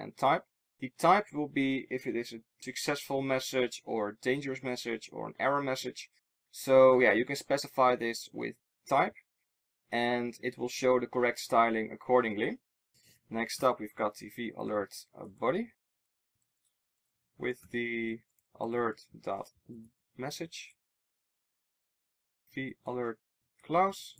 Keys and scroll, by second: 16.0 super+z, 17.3 super+z.